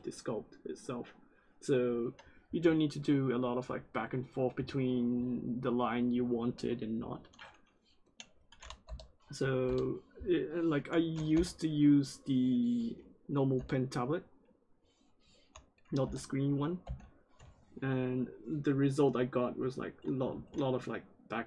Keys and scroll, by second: 8.8 p, 9.6 p, 11.3 p, 13.5 p, 16.0 p, 16.8 i, 20.2 ctrl+z.